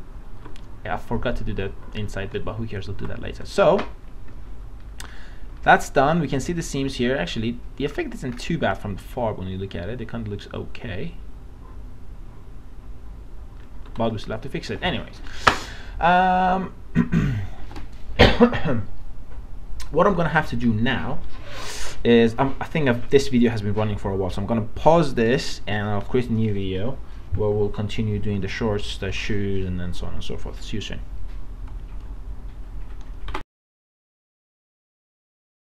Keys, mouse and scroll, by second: 2.4 alt+middle click, 3.5 click, 4.4 middle click, 5.6 scroll up 1, 7.9 scroll down 1, 8.7 click, 9.3-13.7 middle drag, 14.5-15.7 middle drag.